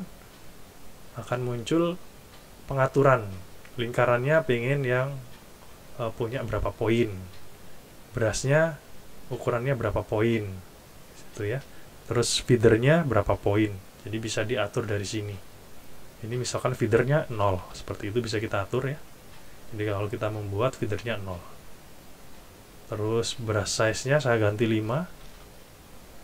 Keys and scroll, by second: 17.5 0, 24.9 5.